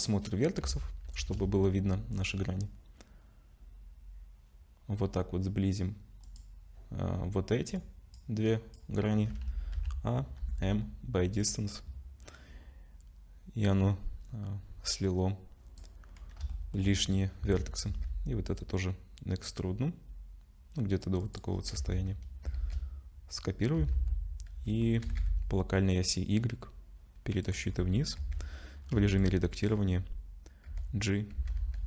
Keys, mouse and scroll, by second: 16.4 click, 16.5 shift+middle click, 16.9-17.4 scroll up 2, 21.5-22.4 scroll down 3, 21.8 Tab, 22.6 shift+d, 27.7-28.2 scroll down 5, 28.2 Tab, 28.8 scroll up 1, 28.9 1, 29.2 click, 29.8 scroll up 2, 30.7 g.